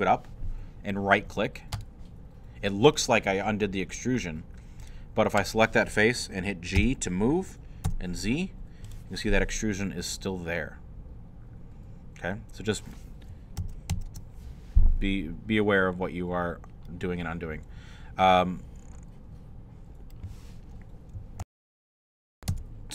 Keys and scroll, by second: 6.8 g, 7.9 z, 13.6 ctrl+z, 21.4 super+., 22.5 super+Tab.